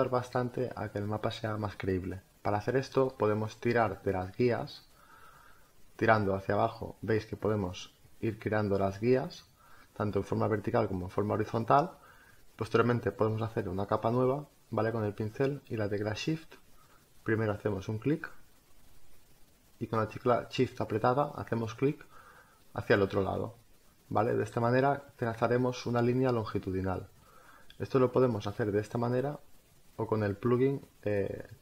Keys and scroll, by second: 24.1 ctrl+alt+z.